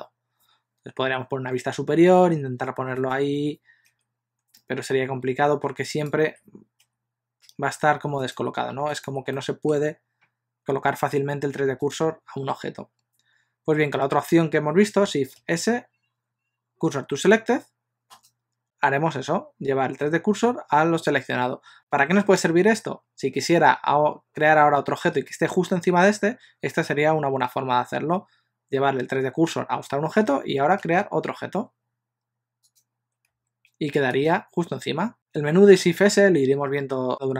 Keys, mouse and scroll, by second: 1.0 KP_7, 3.0 shift+right click, 3.9 KP_1, 5.9 shift+right click, 6.9 KP_7, 8.3 shift+right click, 8.9 shift+right click, 9.4 middle click, 11.9 shift+right click, 15.4 shift+s, 30.8 shift+a, 33.3 s, 35.5 shift+s.